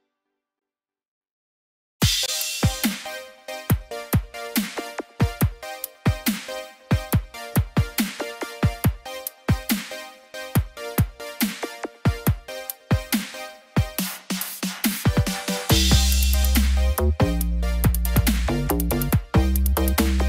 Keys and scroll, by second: 4.6 ctrl+t, 11.0 ctrl+0.